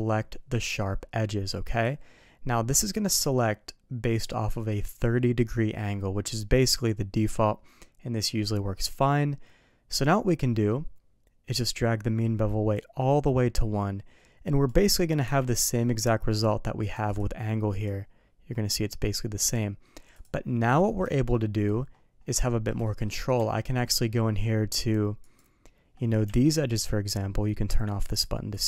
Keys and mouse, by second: 10.4 middle click, 12.7-14.7 drag, 15.2 Tab, 15.7 middle click, 16.8 click, 17.2-17.9 drag, 19.5-20.3 drag, 20.7 middle drag, 21.1 shift+middle drag, 22.5 middle click, 22.8 shift+middle drag, 23.4 Tab, 25.2 click, 26.4 alt+a, 28.1 click, 28.5 click.